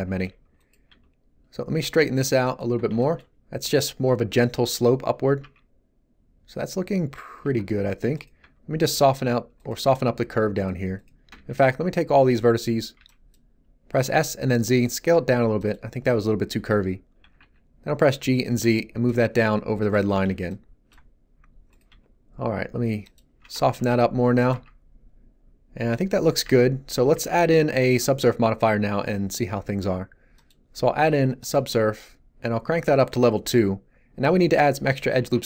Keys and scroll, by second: 0.8 g, 5.4 Tab, 8.3 g, 11.3 b, 13.9 s, 14.1 z, 17.2 g, 17.3 z, 21.8 g, 23.4 Tab, 24.0 g, 24.5 Tab, 35.2 Tab.